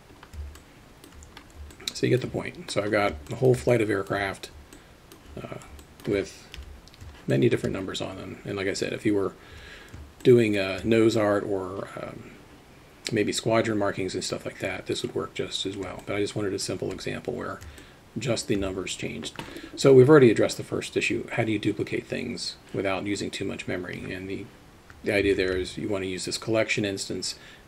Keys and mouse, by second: 0.8-1.4 alt+shift+middle drag, 2.2 alt+middle click, 3.4-6.7 alt+shift+middle drag, 6.7 KP_3, 13.0-15.9 middle drag, 16.3 alt+shift+middle click, 18.0-19.7 alt+shift+middle drag, 25.4 shift+a.